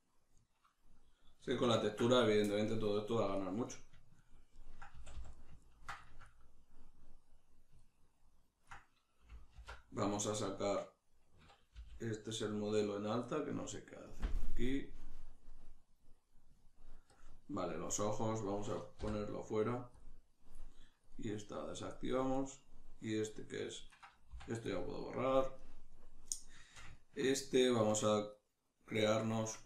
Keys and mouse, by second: 5.0 a, 9.7 alt+h, 10.2 right click, 11.8 g, 12.9 right click, 15.3-19.0 drag, 19.0 m, 21.0-22.4 drag, 22.4 right click, 23.9 right click, 24.3 x, 25.6 right click, 26.6-29.6 ctrl+shift+middle drag.